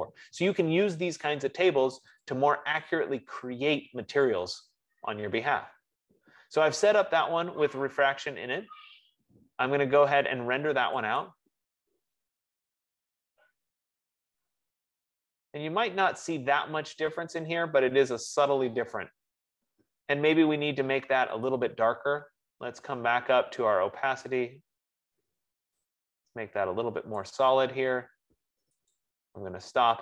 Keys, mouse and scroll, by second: 3.1-8.0 drag, 12.1-16.8 drag, 22.0-26.9 drag, 27.5 click, 29.1 click.